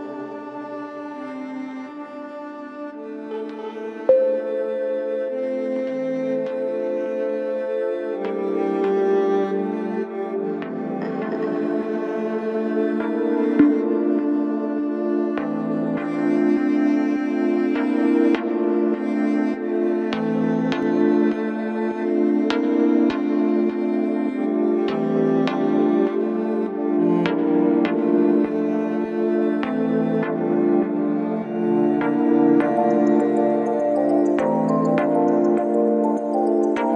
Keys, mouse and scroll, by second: 2.1 scroll down 2, 4.1 ctrl+2, 5.4-6.0 scroll up 1, 6.0-7.1 scroll up 1, 9.1-10.0 drag, 10.0 Tab, 11.2 a, 12.2-13.9 drag, 13.9 s, 19.8 middle click, 20.4 Tab, 20.9-22.0 middle drag, 22.0 KP_1, 22.8 Tab, 23.5 s, 26.0 Tab, 26.4 scroll down 1, 26.7-28.5 middle drag, 28.5 KP_1, 29.4-29.7 scroll up 1, 29.9-31.5 right drag, 31.5-32.2 scroll up 2, 32.2 scroll up 1, 32.4-33.9 scroll down 1, 33.9-36.0 drag, 36.0 s.